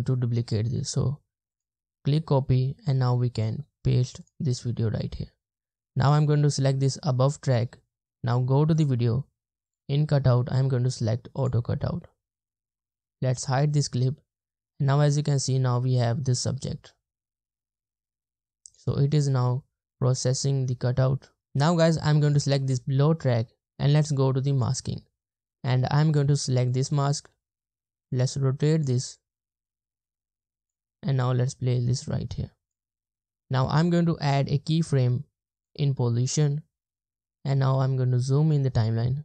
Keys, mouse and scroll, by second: 2.8 right click, 37.7-38.7 ctrl+scroll up 1.